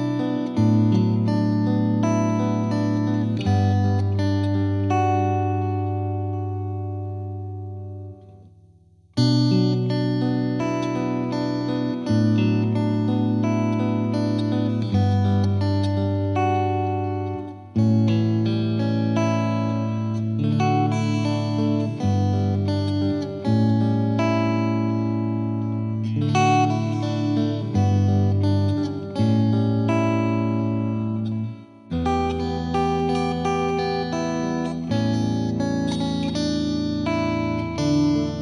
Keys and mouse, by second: 1.4-2.7 drag, 4.9 Escape, 7.1-8.3 drag, 8.0 F3, 8.3 F3, 9.4-10.5 drag, 10.9 F2, 12.7 click, 13.7 click, 15.4 click, 23.1 click, 24.1 click, 26.7-27.9 drag, 29.0-30.2 drag, 33.4-34.6 drag, 35.2 F2, 36.7 click.